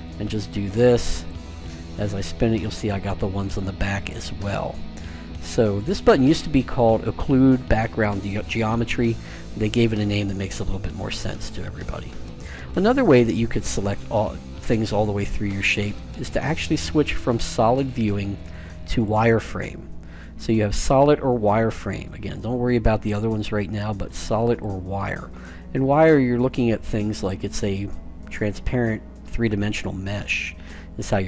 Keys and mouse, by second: 1.1-2.9 right drag, 2.9 middle click, 8.0-9.9 drag, 10.8-13.5 middle drag, 13.8 a, 18.7-20.5 drag, 25.0-26.8 middle drag.